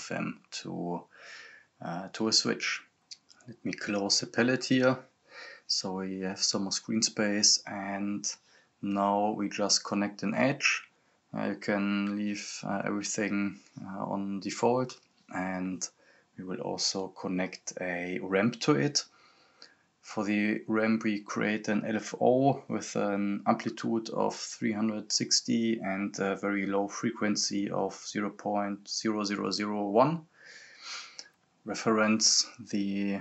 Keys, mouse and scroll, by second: 6.6 right click, 6.8-8.3 typing, 8.2 click, 11.4 right click, 12.0-13.7 typing, 14.4 click, 17.7-18.5 typing, 19.4 click, 25.8 click, 30.2 scroll up 1, 31.0 click, 32.9-33.2 drag.